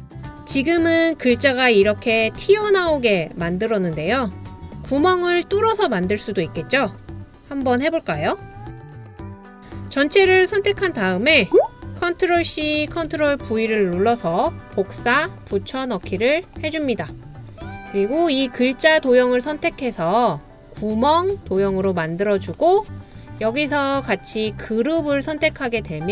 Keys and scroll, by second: 12.2 super+c, 12.9 super+v.